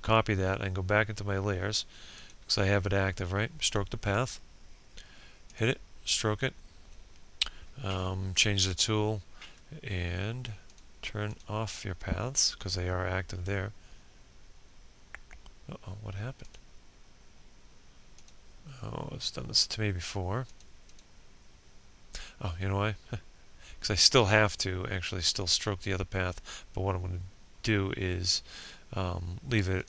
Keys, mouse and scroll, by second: 5.5 p, 7.6 click.